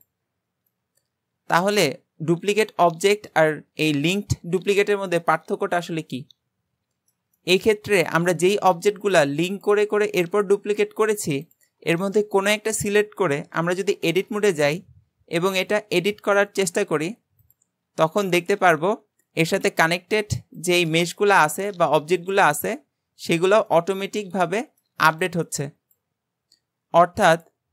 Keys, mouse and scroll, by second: 0.7-3.9 middle drag, 7.4-8.0 shift+middle drag, 8.0 click, 8.5 click, 9.1 drag, 9.6 click, 11.5 click, 12.0 shift+middle click, 12.7-14.1 scroll up 1, 14.1 Tab, 15.6 click, 16.4 click, 16.8 s, 17.6 ctrl+z, 23.7-24.9 middle drag, 24.9 Tab, 25.2 click.